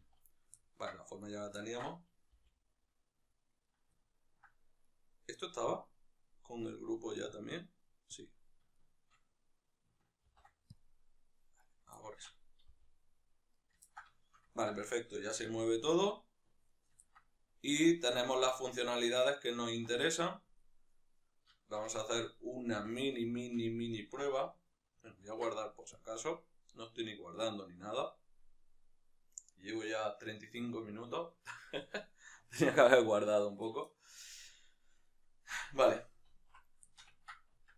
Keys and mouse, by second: 0.3-0.9 ctrl+middle drag, 0.9-1.3 right drag, 1.3-3.5 ctrl+middle drag, 2.1 g, 3.5 right click, 3.7-4.6 ctrl+middle drag, 4.6 right click, 5.5-8.6 right drag, 10.7 ctrl+p, 11.3-11.7 right drag, 11.7-13.4 ctrl+middle drag, 12.5 g, 13.4 right click, 13.6-16.6 ctrl+shift+middle drag, 15.3 g, 16.6 right click, 16.8-34.7 ctrl+middle drag, 22.5 n, 34.7 right click, 36.2 alt+q, 36.6-37.7 ctrl+shift+middle drag, 37.4 Tab.